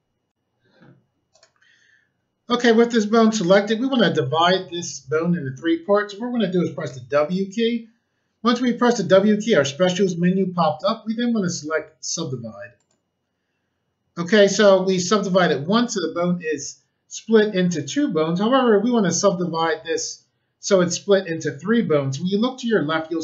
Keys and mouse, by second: 0.3 click, 1.3 click, 6.8 w, 12.7 click.